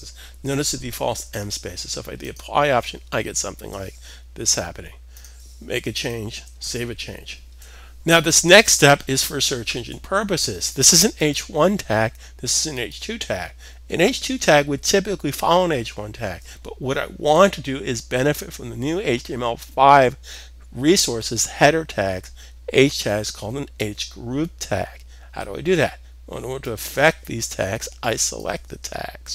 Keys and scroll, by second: 6.2 super+s.